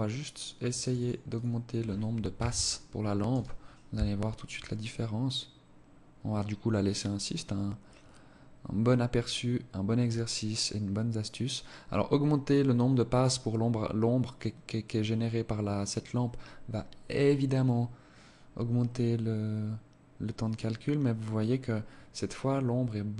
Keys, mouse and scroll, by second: 0.2 click, 1.2 ctrl+s.